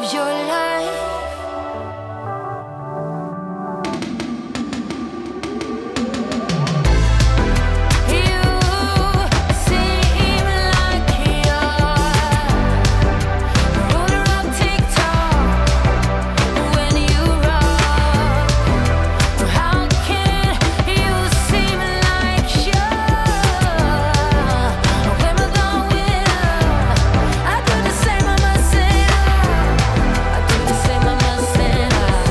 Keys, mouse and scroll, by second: 0.7 space, 1.9 click, 2.8 right click, 3.6 click, 6.5 Return, 7.1-8.8 typing, 9.3 ctrl+space, 10.1-11.2 typing, 13.1-15.6 typing, 15.9 Return, 18.0 click, 18.4-19.4 typing, 19.5 Return, 20.4-23.5 typing, 21.5 click, 25.6 click, 28.0 ctrl+s, 29.3 click, 31.3 ctrl+space.